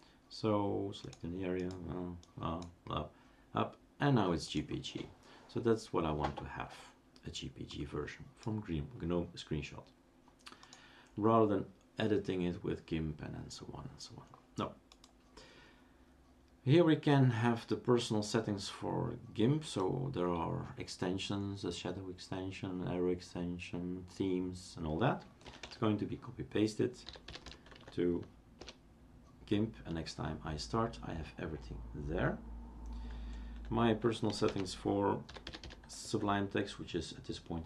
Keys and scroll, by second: 25.7 typing, 26.8-27.9 typing, 28.5 Return, 34.4-36.1 typing.